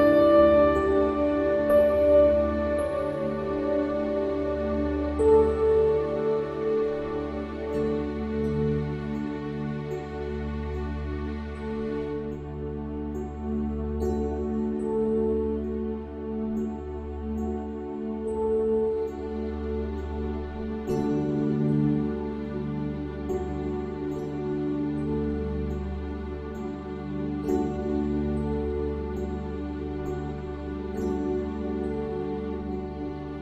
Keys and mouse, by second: 26.6 click.